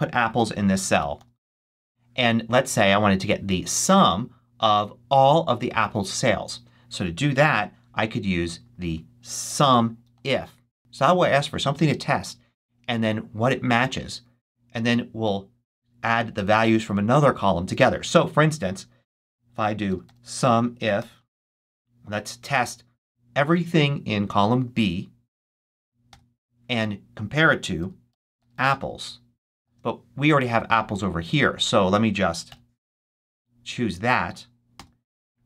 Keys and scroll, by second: 0.3-1.6 typing, 7.3 =, 8.9-10.7 typing, 19.5-21.7 typing, 26.0 ,, 27.5-29.5 typing, 32.4 shift+BackSpace, 33.1 BackSpace, 34.7 '.